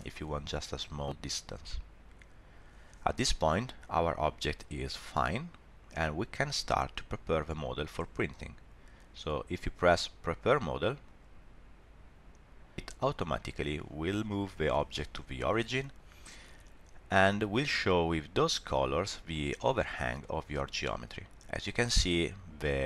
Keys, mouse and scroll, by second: 3.1-3.6 scroll down 3, 3.6 middle click, 11.0 click, 12.7 middle click, 16.4 middle click, 19.6-20.1 scroll up 1, 20.2 shift+middle click, 20.6 middle click.